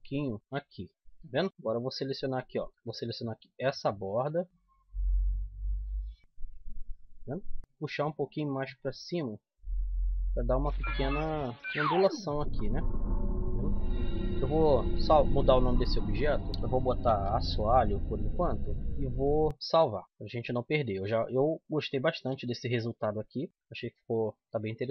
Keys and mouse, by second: 1.3-2.5 middle drag, 2.5 a, 2.7-4.5 right drag, 3.9 z, 4.4 z, 4.7 middle click, 6.0-9.2 middle drag, 11.5 Tab, 12.9 KP_1, 15.3 n, 16.3-17.7 drag, 17.3 s, 18.7 n, 20.0 click, 21.8-22.9 middle drag, 22.9 KP_7, 23.5 middle click, 24.5 middle click.